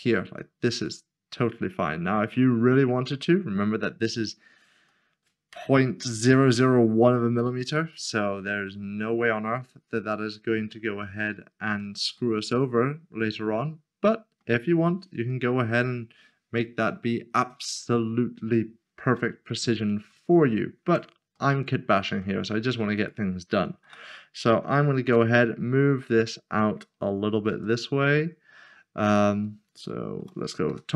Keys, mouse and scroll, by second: 4.8 middle click, 8.1 middle click, 9.0 scroll down 1, 11.1 shift+middle click, 12.1 middle click, 14.5 scroll down 1, 15.3 middle click, 15.7 scroll down 1, 19.3 shift+middle click, 20.1 shift+middle click, 20.8 Tab, 21.3 middle click, 22.2 shift+middle click, 22.9 click, 24.6 g, 24.9 z, 27.5 z, 30.0 click, 30.3-30.7 scroll down 1, 30.7 7.